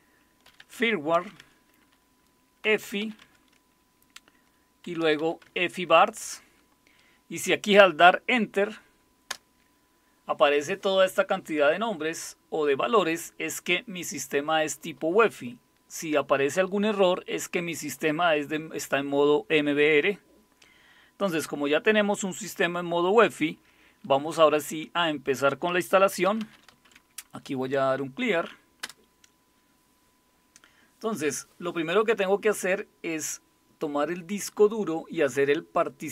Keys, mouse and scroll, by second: 0.0-3.5 typing, 4.6-5.7 typing, 9.3 Return, 26.0-27.3 typing, 28.8 Return.